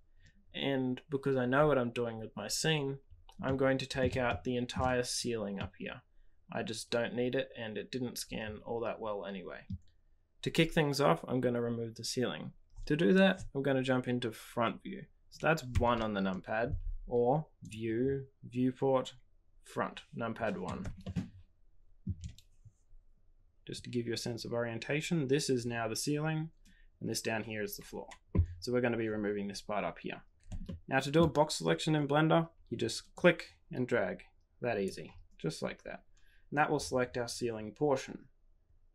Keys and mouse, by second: 3.5 middle click, 4.2 shift+click, 4.3 shift+middle click, 5.5-9.7 middle drag, 15.7 KP_1, 17.6-20.4 drag, 21.1 shift+middle click, 30.6 shift+middle click, 33.2-36.1 drag.